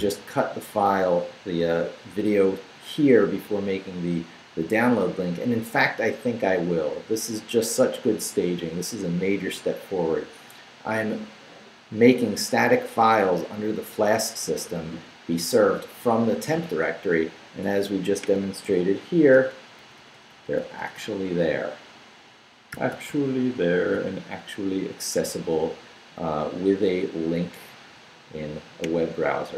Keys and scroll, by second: 19.3 shift+super+=, 22.7 shift+super+=.